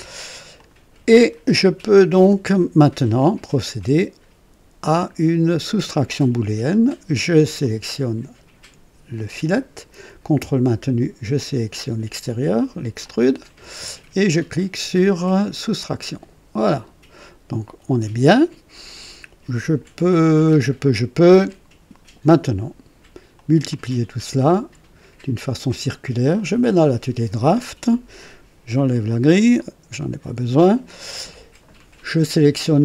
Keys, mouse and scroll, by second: 0.5 click, 1.1-3.3 drag, 7.6 click, 13.0 ctrl+click, 15.6 click, 16.7-18.0 drag, 18.2 click, 19.4 right click, 20.0-21.6 drag, 23.3 click, 26.3 click, 29.5 click.